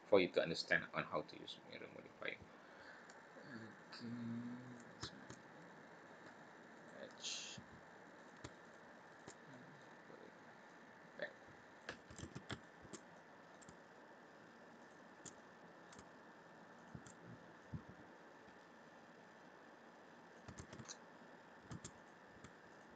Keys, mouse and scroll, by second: 0.2 middle click, 2.5-3.3 scroll up 2, 4.6 click, 6.7 click, 7.2 click, 8.1 click, 8.6 shift+click, 9.1 shift+click, 9.5 middle click, 10.6 click, 12.2 ctrl+z, 12.6 shift+middle click, 13.1 middle click, 14.8 shift+click, 15.3 middle click, 16.7 shift+click, 17.6 click, 20.5 ctrl+z, 21.9 click, 22.7 shift+click.